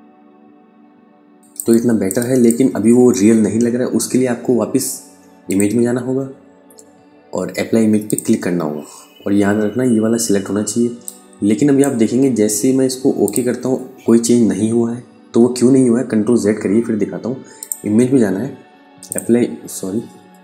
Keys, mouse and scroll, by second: 0.1 click, 0.9 click, 1.5 click, 4.9 click, 7.5 click, 10.5 click, 15.1 ctrl+z, 17.0 click, 19.7 Escape.